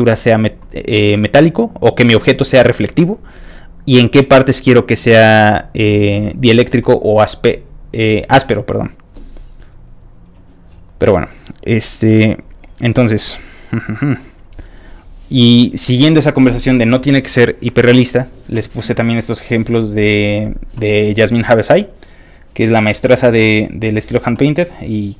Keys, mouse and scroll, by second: 1.0-1.3 scroll down 1, 3.4-10.3 scroll up 2, 10.3 click, 11.3 middle click, 11.3 scroll up 1, 11.4 scroll down 1, 11.9 scroll up 1, 12.4 middle click, 13.0 middle click, 14.0 click, 15.0 scroll down 1, 15.1-15.9 scroll up 1, 15.9 click, 16.0 scroll down 1, 17.2 click, 18.1-20.6 scroll up 12, 21.2-22.1 scroll up 5, 22.1 scroll down 1, 22.5 scroll up 2, 22.6 scroll down 1, 23.6 middle click, 23.7 middle click, 25.1 click.